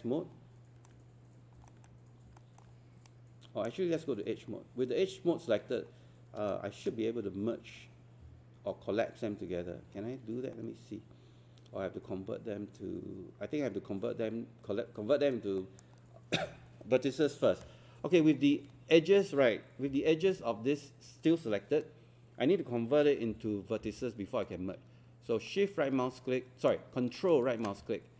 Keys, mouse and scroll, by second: 1.1 scroll up 1, 1.7 alt+middle click, 2.1 scroll down 1, 2.4 alt+middle click, 3.1-4.5 right drag, 6.5-16.5 shift+right drag, 17.8 scroll up 1, 18.2 scroll down 1, 19.9 4, 23.6-24.3 typing, 25.5 shift+right click, 27.3-28.1 ctrl+right drag.